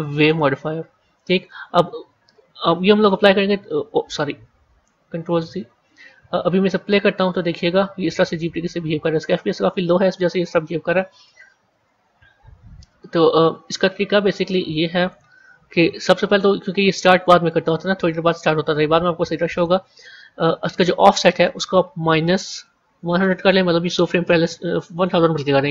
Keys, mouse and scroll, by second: 2.8-4.8 drag, 4.8 ctrl+z, 7.1-12.1 drag, 14.3-23.3 drag, 23.3 KP_0.